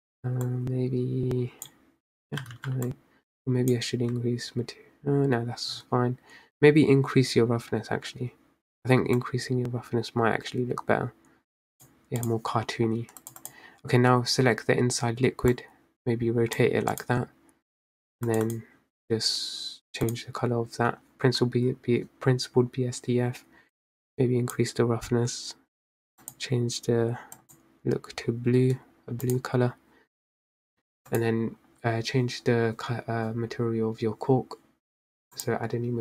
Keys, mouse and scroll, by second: 0.9-2.9 drag, 2.9 ctrl+z, 3.3-7.0 drag, 9.7-13.0 drag, 14.0 click, 16.1 click, 17.5 click, 19.0 click, 20.7-22.4 drag, 22.4-22.9 scroll down 3, 24.4-27.1 drag, 30.0 drag, 30.7 click, 31.3 click, 35.5 click.